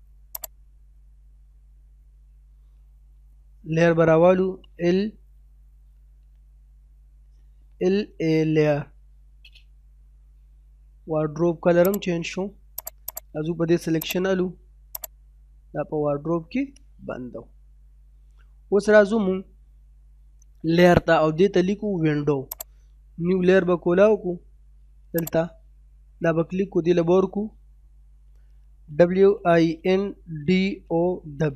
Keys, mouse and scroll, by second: 2.0 middle click, 3.7 typing, 7.7-8.6 typing, 11.9 click, 12.4 scroll up 1, 12.8 click, 16.1-16.5 scroll down 1, 16.5 middle click, 17.2-17.5 scroll down 1, 17.5 middle click, 18.0 scroll down 1, 18.2 middle click, 22.5 click, 25.2 click, 28.1-30.8 typing.